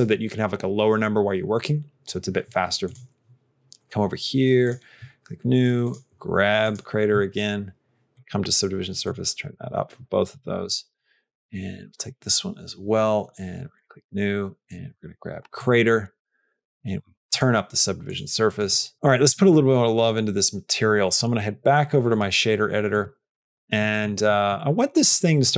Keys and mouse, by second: 4.5 click, 5.7 click, 8.0 click, 17.2 click, 18.9 shift+middle click, 21.2 click, 23.3 middle click, 23.7 middle click, 24.1 middle click.